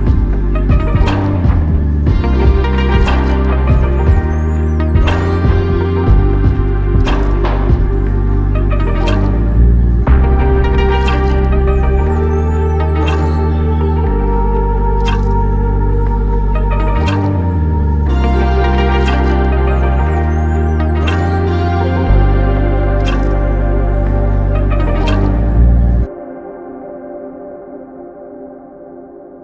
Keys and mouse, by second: 0.9 alt+click, 4.2 alt+m, 5.7 alt+click, 7.5 r, 14.4 shift+click, 15.4 shift+click, 20.4 shift+click, 24.2 shift+click, 24.9 shift+click, 25.1 ctrl+alt+click, 26.2 alt+click, 28.5 f.